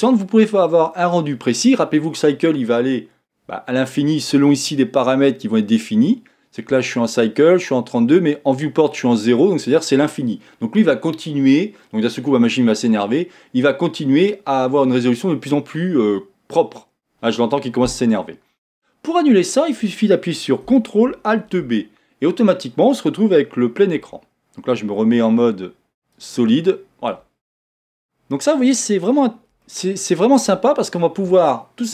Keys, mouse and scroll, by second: 21.6 ctrl+alt+b, 23.9 z, 25.4 z, 28.0-30.7 middle drag, 30.7-31.9 scroll down 1.